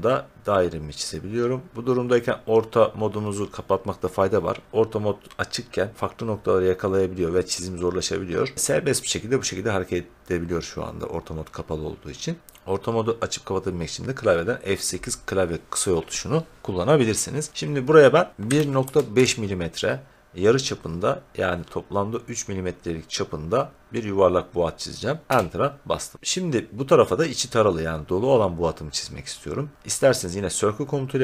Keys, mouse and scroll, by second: 18.2-19.6 typing, 25.3 Return.